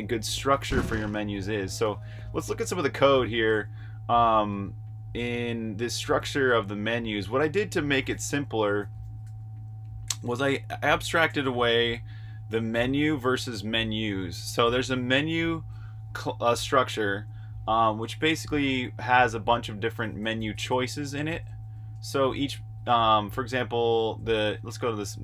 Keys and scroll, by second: 0.0-1.5 typing, 2.9 super+q, 4.4 super+Tab, 8.5-9.6 typing, 10.0 super+j, 12.7-13.4 typing, 15.3 j, 16.5-16.9 typing, 18.2-20.6 typing, 24.0-25.2 typing.